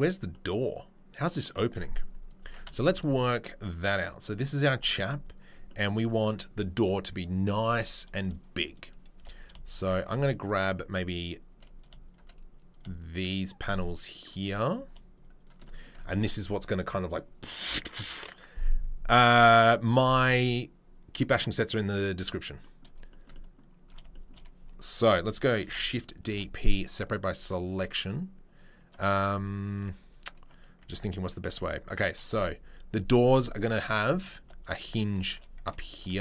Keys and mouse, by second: 1.7 click, 1.7-2.2 middle drag, 2.2 click, 2.6-9.3 shift+middle drag, 9.3 click, 9.4 shift+middle click, 10.2 click, 10.3-11.7 middle drag, 11.7 click, 11.8-12.9 shift+middle drag, 12.0 click, 12.9 shift+click, 13.0 shift+middle click, 13.2 shift+click, 13.2 shift+middle click, 13.6-15.2 shift+drag, 15.2-36.2 shift+middle drag, 25.6 shift+d, 26.3 p, 29.2 Tab, 29.7 Tab, 30.8 Tab, 31.4 Tab, 32.3 2, 35.9 ctrl+r.